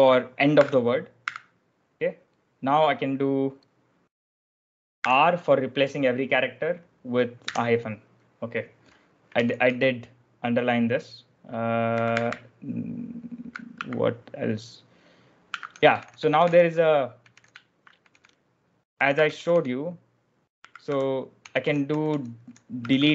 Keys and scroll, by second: 0.5-1.1 typing, 4.9 r, 7.3 -, 8.9-9.8 typing, 11.8 ctrl+e, 12.0 ctrl+e, 15.4 ctrl+d, 15.5-23.1 typing.